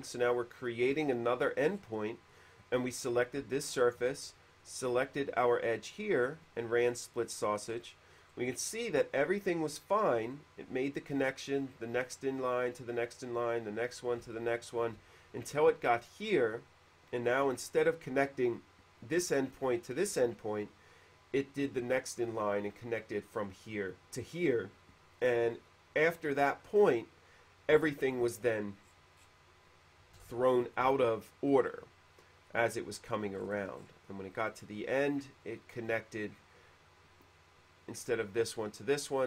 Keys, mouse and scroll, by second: 1.6 middle click, 2.5 click, 3.9 shift+click, 7.9 middle click, 8.3 middle click, 9.3 middle click, 14.5 shift+middle click, 25.4-29.7 middle drag, 30.6 shift+middle click, 33.6 middle click.